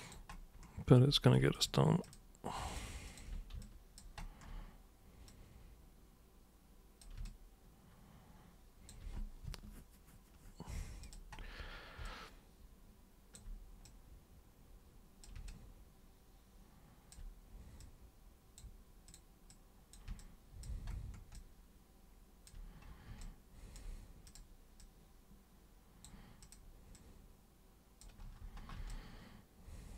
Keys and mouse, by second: 1.5 ctrl+shift+super+click, 2.1 ctrl+shift+super+click, 2.7 ctrl+shift+super+click, 3.1 ctrl+shift+super+click, 3.6 alt+super+click, 5.3-7.0 super+drag, 7.3-8.9 alt+super+drag, 11.0 super+click, 12.0-13.4 alt+super+drag, 13.8 super+click, 15.5-17.1 alt+super+drag, 17.8 super+click, 19.1 super+click, 19.5 super+click, 20.2 alt+super+click, 21.3-22.5 alt+super+drag, 23.2-23.8 alt+super+drag, 24.3 super+click, 24.8-26.1 super+drag, 26.4 super+click, 27.0-28.0 super+drag, 28.9-29.9 alt+super+drag.